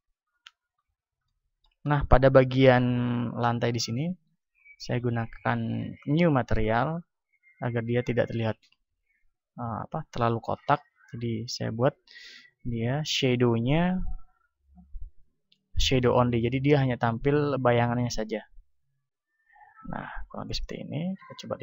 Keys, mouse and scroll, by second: 0.0-1.6 middle drag, 1.9-15.1 drag, 15.1-16.1 middle drag, 18.7-20.7 drag, 21.4 F12.